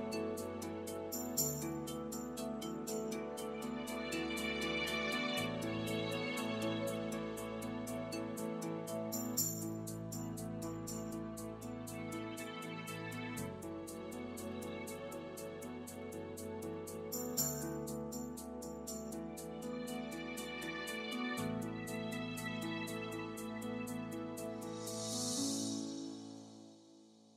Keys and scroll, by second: 7.0-10.5 typing, 12.0-13.8 typing, 24.8 super+s.